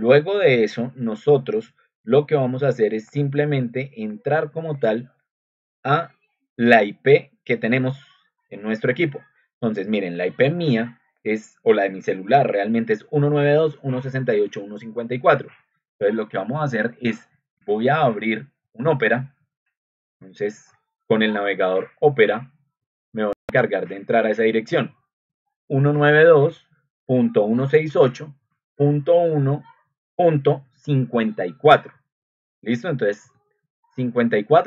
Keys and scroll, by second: 25.2-26.4 typing, 28.1 Right, 28.4 Left, 28.6-29.3 typing, 30.6 BackSpace, 31.1 4, 33.2 ctrl+2.